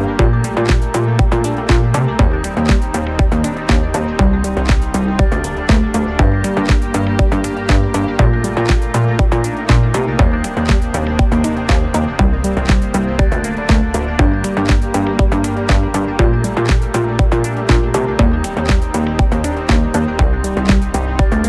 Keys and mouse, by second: 0.2 shift+a, 2.2 s, 2.8-6.0 middle drag, 2.8 s, 5.0 s, 6.0 click, 6.5 s, 6.8 middle click, 7.2 click, 7.7 s, 8.0-10.3 middle drag, 8.1 s, 8.9 s, 10.3-11.5 drag, 11.0 s, 11.5-12.8 shift+middle drag, 12.0 s, 12.8-14.3 drag, 14.3-16.1 middle drag, 16.1-19.9 drag, 16.7 shift+d, 19.4 s, 19.9 middle click, 20.7 click, 21.1 s.